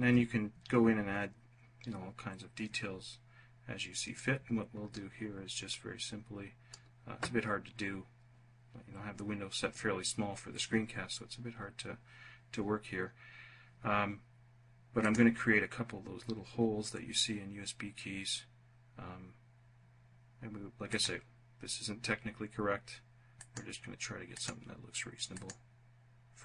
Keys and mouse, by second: 5.3-6.5 drag, 14.6 click, 20.5 click, 23.0 click, 23.9 click, 24.9 click, 26.3 click.